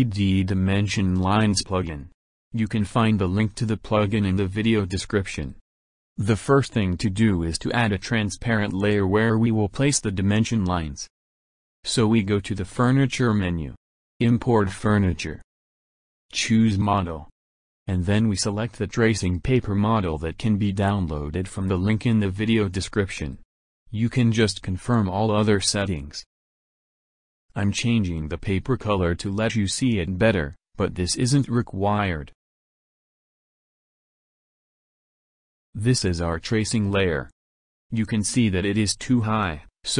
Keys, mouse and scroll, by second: 13.6 click, 15.0 click, 17.0 click, 18.9 click, 22.7 click, 23.9 click, 24.6 click, 25.3 click, 26.0 click, 29.1 click, 29.3 click, 30.8 click, 32.4 click, 33.2 click, 34.0 click, 35.2-36.0 middle drag, 37.2-38.3 drag.